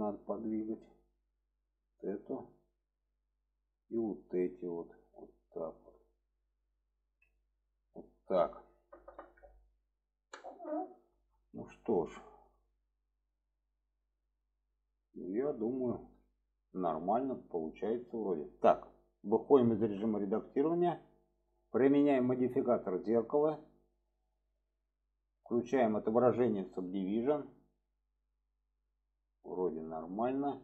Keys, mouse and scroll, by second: 0.2 click, 1.7 drag, 2.5-3.1 drag, 3.9 drag, 4.6 click, 8.0 shift+middle click, 11.0 shift+middle click, 11.4-14.2 middle drag, 14.7 alt+middle click, 16.4 shift+middle click, 19.8 Tab, 20.2-21.4 middle drag, 22.2-23.4 drag, 26.7 click, 27.3-30.6 middle drag.